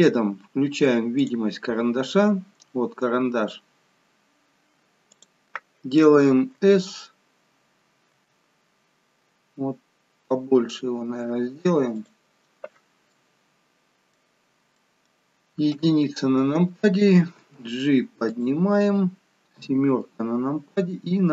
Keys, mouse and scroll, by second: 1.6 click, 3.3-4.2 scroll down 2, 5.2 click, 6.9 s, 8.2 s, 13.2 middle click, 14.8 middle click, 15.9 KP_1, 17.4 g, 20.0 KP_7.